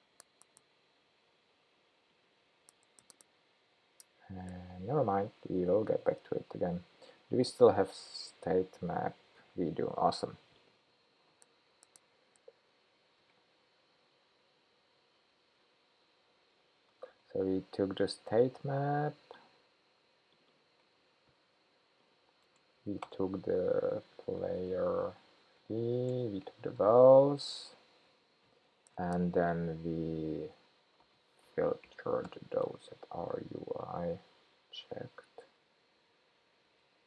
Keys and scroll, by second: 21.0 super+c, 22.8 super+v, 34.8 Return, 35.8 shift+super+p.